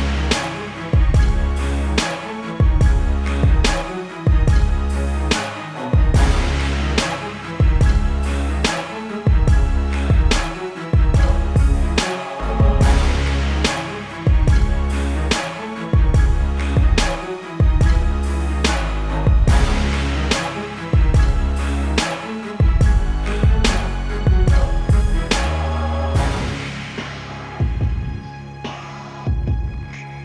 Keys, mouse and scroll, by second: 0.8 click, 1.4 right click, 4.5 click, 7.6 right click, 9.2 click, 11.5 ctrl+Num_Lock, 12.1 click, 14.3 KP_Enter, 14.7 Right, 14.9 Up, 15.5 click, 18.9 alt+click, 20.7 click, 23.8 right click, 25.3 click.